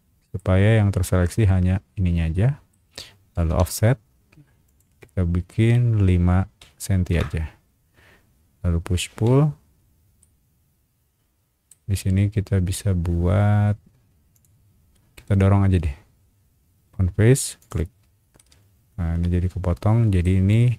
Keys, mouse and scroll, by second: 2.3 ctrl+shift+middle click, 3.5 f, 4.6 click, 6.6 KP_5, 7.1 KP_Enter, 9.1 p, 10.2-11.7 middle drag, 14.3 click, 17.6 click, 18.3-20.2 middle drag.